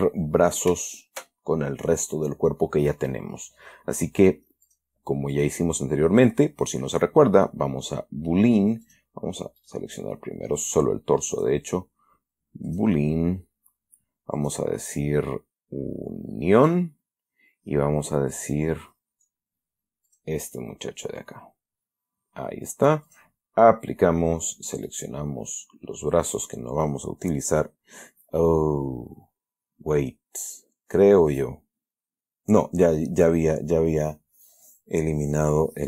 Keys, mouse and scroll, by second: 1.2 shift+right click, 5.0 click, 5.6 click, 9.2 click, 9.9 right click, 11.6 click, 13.0 click, 14.7 click, 16.9 click, 18.7 click, 20.4 click, 23.4 click, 25.0 right click.